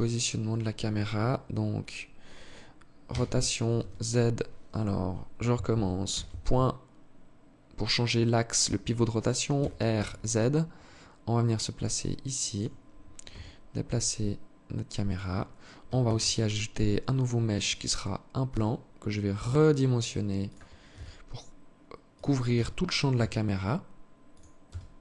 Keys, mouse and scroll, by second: 2.4 r, 5.4 ., 8.8 r, 12.5 g, 15.3 shift+a, 17.7 s, 20.1 s, 21.8 g, 23.9 s.